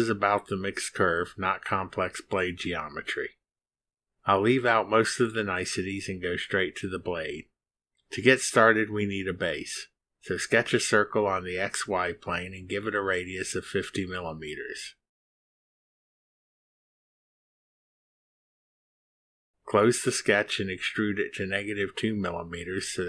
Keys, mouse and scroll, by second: 9.8 click, 10.5 click, 11.3 click, 12.3 click, 13.5 click, 14.3 click, 14.9 drag, 15.7 click, 16.6 click, 18.3 5, 19.0 Return, 21.3 click.